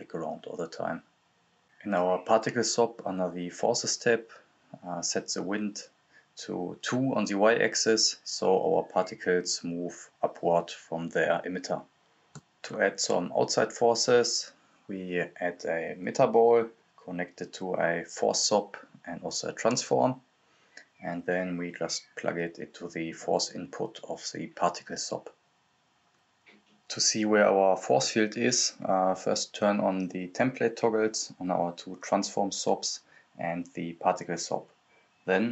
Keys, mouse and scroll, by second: 4.5 click, 4.5-10.7 drag, 10.9-11.9 typing, 12.4 click, 13.9 right click, 14.2-15.3 typing, 16.1 click, 17.8 right click, 18.2-19.4 typing, 20.1 click, 23.3 click, 23.3-25.9 drag, 28.2 click.